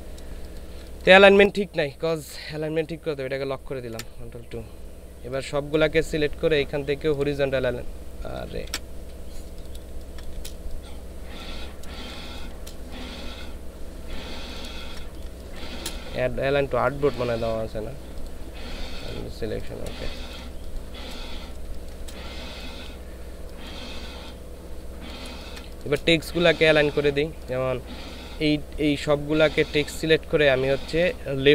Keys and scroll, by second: 0.3 ctrl+space, 3.9 ctrl+KP_2, 8.7 ctrl+z, 9.8 ctrl+space, 11.9 ctrl+space, 14.7 ctrl+space, 15.2 ctrl+space, 20.0 ctrl+space, 20.5 ctrl+space, 21.6 ctrl+space, 25.3 ctrl+space.